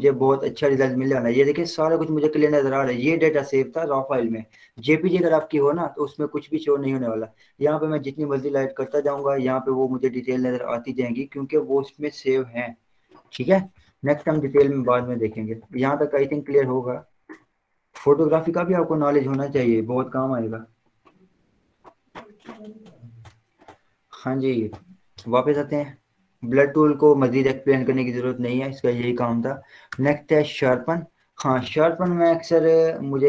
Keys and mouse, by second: 0.9 v, 3.4 click, 12.3 click, 12.5 w, 13.1 Down, 13.3 Return, 15.1-21.3 drag, 23.2 click, 25.3 z, 26.4 click, 28.3 b, 29.9 right click, 30.6 click, 31.5 ctrl+0.